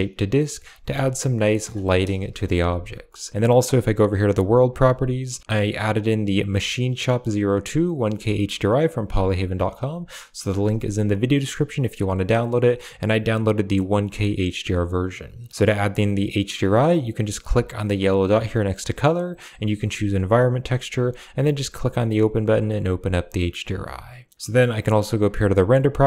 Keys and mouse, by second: 0.3 middle click, 1.4 middle click, 2.1 KP_0, 3.9 click, 5.1 click, 6.0-11.6 drag, 12.9-14.6 drag, 16.4 click, 18.4-21.4 drag, 23.0 click, 25.0 click.